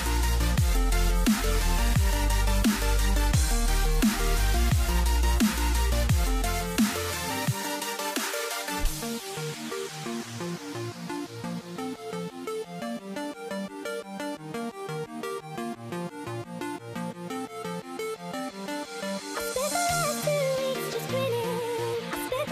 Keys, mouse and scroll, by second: 0.4 w, 1.2 shift+a, 2.9 s, 3.9 s, 5.0 g, 6.2 g, 7.4-10.0 middle drag, 10.0 shift+d, 11.6 shift+right click, 13.2 r, 14.9-16.7 middle drag, 16.7 shift+click, 18.6 r, 20.5-21.4 scroll down 1, 22.4 shift+click.